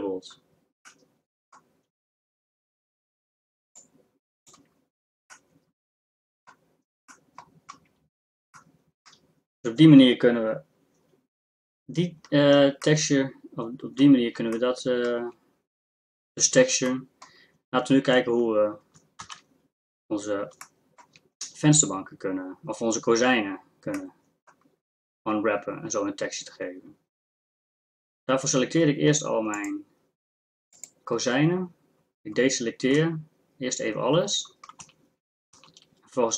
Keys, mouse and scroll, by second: 4.2 click, 19.3 shift+z, 29.9-32.4 drag, 33.0 a, 34.8 z, 35.5 z.